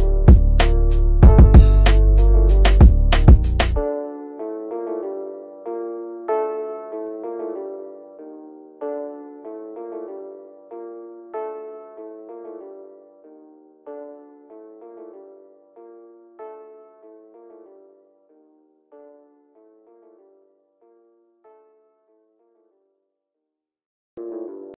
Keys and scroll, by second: 3.9 F3, 16.9 shift+F2.